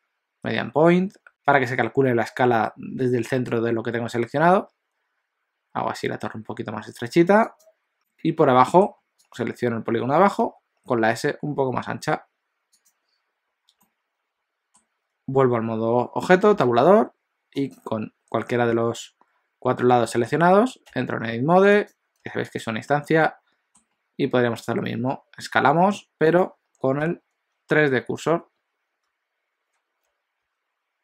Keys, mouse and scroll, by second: 8.0 s, 8.0 middle click, 9.4 click, 10.5 s, 13.8 middle click, 16.5 Tab, 17.7 click, 20.1 shift+middle click, 20.9 Tab, 21.7 click, 22.2 3, 22.6 click, 23.2 middle click, 24.9 s, 27.0 ..